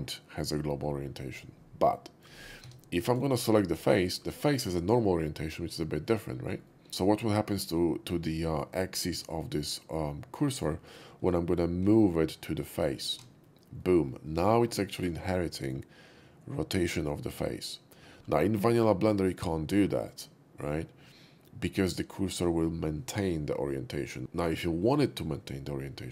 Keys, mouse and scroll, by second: 1.1 scroll up 1, 1.3 middle click, 2.7 Tab, 3.1 click, 3.4 shift+middle click, 3.8 shift+middle click, 6.7 middle click, 6.9-10.2 middle drag, 10.4 middle click, 12.5 shift+s, 13.7 middle click, 14.9 shift+middle click, 15.2 shift+middle click, 18.2 middle click, 18.5 middle click.